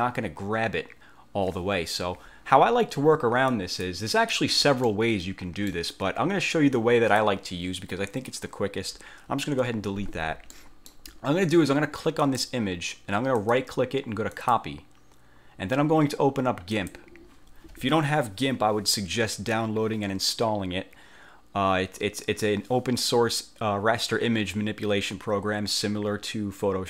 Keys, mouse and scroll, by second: 3.7 click, 4.3 click, 5.0-6.0 middle drag, 6.7 click, 8.1 click, 9.7 Delete, 10.7 middle click, 10.9 click, 12.3 click, 13.5 click, 14.5 click, 16.9 click.